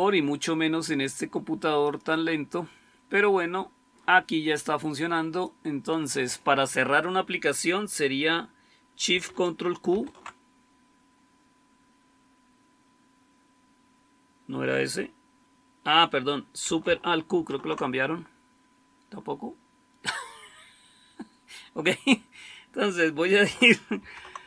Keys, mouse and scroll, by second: 9.8 ctrl+super+q, 17.2 alt+super+q, 23.9 super+2.